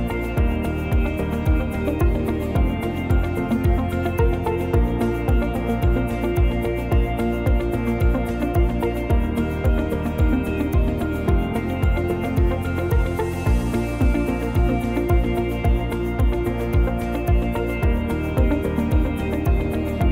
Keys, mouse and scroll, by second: 2.0 click, 3.1 scroll down 1, 3.2 middle click, 4.3 middle click, 11.2 click, 11.5 shift+middle click, 11.9 click, 13.1-13.7 scroll up 2, 13.6 click, 14.6 s, 18.1 middle click, 18.8-19.4 scroll down 1, 19.4 click, 20.0 click.